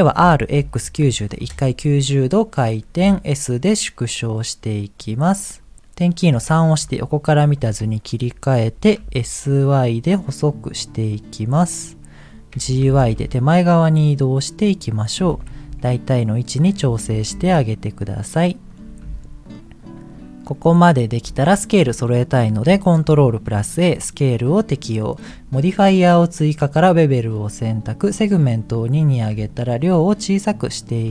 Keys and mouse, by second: 0.2 r, 3.2 s, 6.5 KP_3, 7.9 middle click, 8.9 s, 12.5 g, 15.2 s, 16.8 g, 19.7 middle click, 20.9 middle click, 23.4 ctrl+a, 24.6 middle click, 28.5 click, 29.5-31.0 drag.